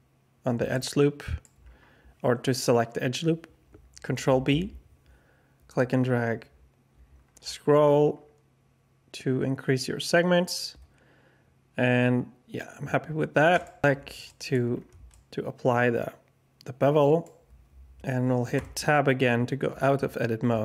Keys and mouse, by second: 0.7 click, 4.2 ctrl+b, 14.2 middle click, 14.3 alt+click, 15.1-17.2 alt+shift+drag, 18.5 Tab.